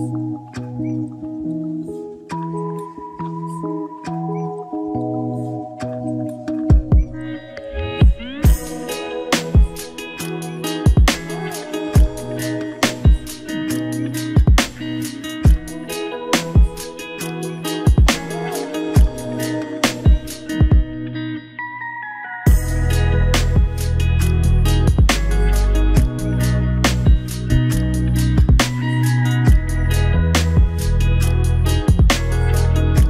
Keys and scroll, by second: 3.0 ctrl+t, 18.0 ctrl+=.